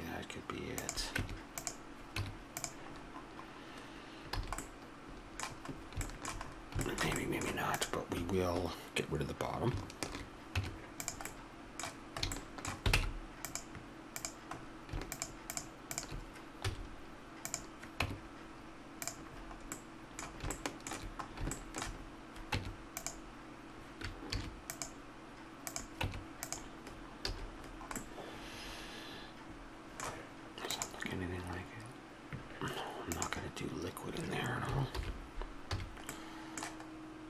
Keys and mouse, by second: 1.2 ctrl+r, 1.2 Tab, 2.2 Tab, 3.0 middle click, 4.4 a, 5.3 middle click, 7.8-9.5 drag, 10.1 shift+h, 10.6 Tab, 12.9 ctrl+Tab, 16.7 x, 18.0 Tab, 22.5 Tab, 24.3 ctrl+r, 26.1 Tab, 27.3 a, 35.0 alt+h, 35.7 a.